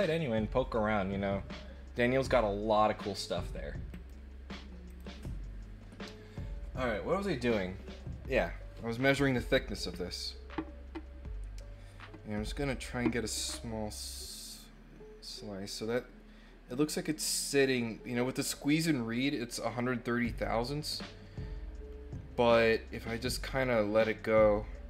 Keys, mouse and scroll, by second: 3.9 click, 4.8 click.